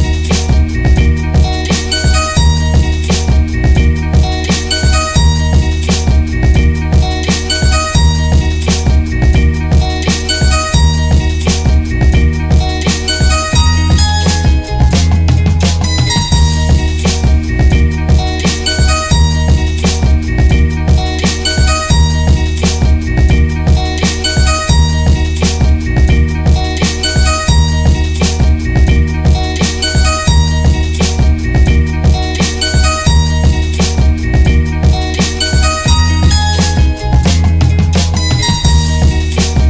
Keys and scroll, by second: 2.1 Return, 15.1 ctrl+g, 25.2 Down, 28.9 ctrl+u, 33.4 Down.